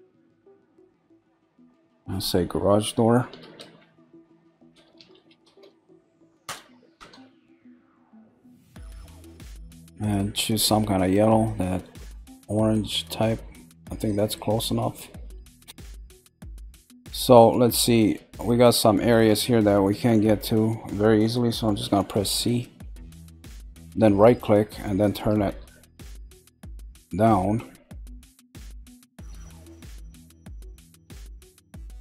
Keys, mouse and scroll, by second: 0.7 click, 0.8 click, 10.0 click, 15.6 shift+middle click, 15.8 click, 16.3-20.3 shift+middle drag, 20.3-21.8 scroll up 1, 21.8 g, 24.6-32.0 middle drag.